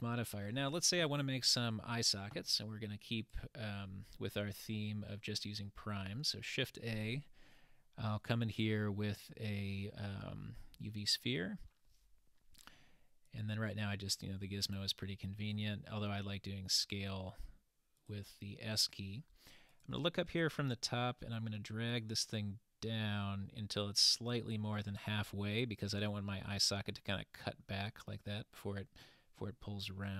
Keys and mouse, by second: 6.1 shift+a, 13.3-14.3 drag, 19.8 click, 21.9-24.6 drag.